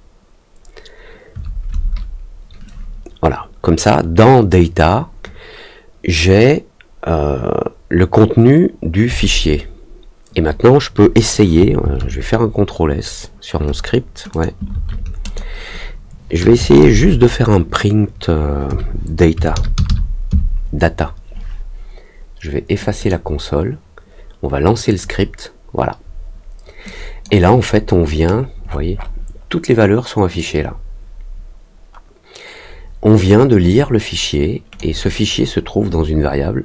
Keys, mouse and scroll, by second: 14.2 click, 15.2 click, 22.9 click, 24.8 click, 26.8 click, 28.1 middle click, 28.6 middle click, 28.9 middle click, 30.3-34.7 drag.